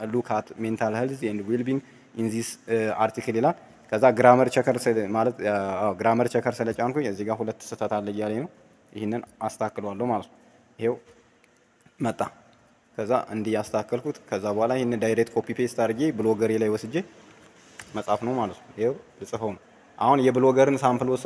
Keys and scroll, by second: 17.7 ctrl+c.